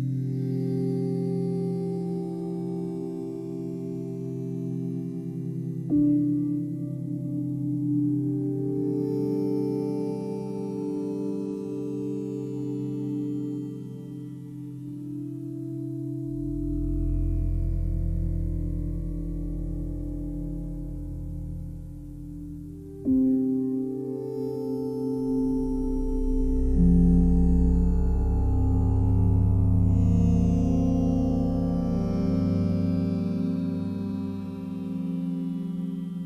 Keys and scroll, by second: 2.1 space, 9.2 ctrl+d.